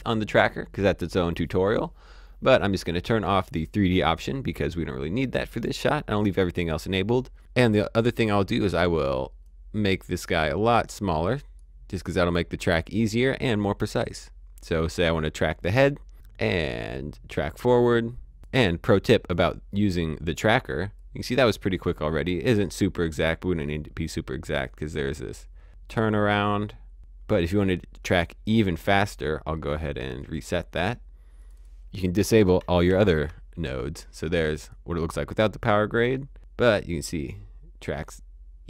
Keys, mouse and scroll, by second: 3.9 click, 8.5 click, 16.4 click, 18.3 click, 21.0 click, 30.2 click, 32.9 ctrl+d, 34.4 click, 36.1 click.